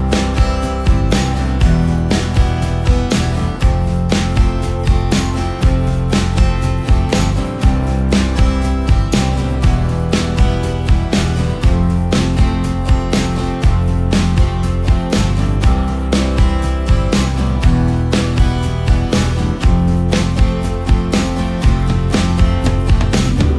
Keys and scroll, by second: 0.0 ctrl+space, 0.5 ctrl+space, 2.5 Down, 2.7 Down, 2.9 Down, 3.1 Down, 4.8 ctrl+space, 7.0 ctrl+space, 13.3 ctrl+space, 22.2 ctrl+space.